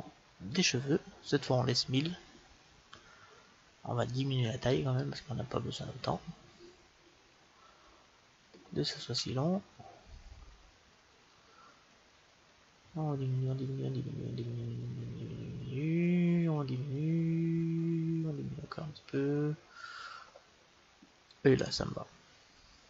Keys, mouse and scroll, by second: 4.6-6.5 drag.